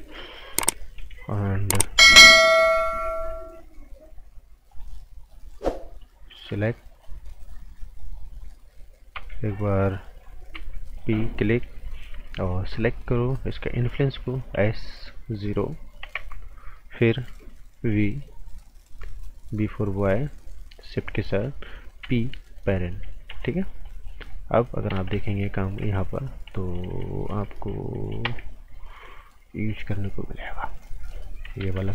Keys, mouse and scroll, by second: 0.4 scroll up 1, 0.7 a, 2.7-4.7 scroll down 1, 4.7 click, 9.1 typing, 10.5 typing, 10.9 click, 12.5 typing, 14.5 typing, 15.3 click, 16.0 KP_0, 16.1 KP_Enter, 17.8 b, 18.8 click, 21.0 shift+click, 22.0 p, 22.7 click, 23.3 z, 23.4 scroll down 1, 23.7 right click, 24.2-24.7 scroll up 1, 24.7-27.5 typing, 24.7 click, 29.5 click, 31.6 ctrl+z.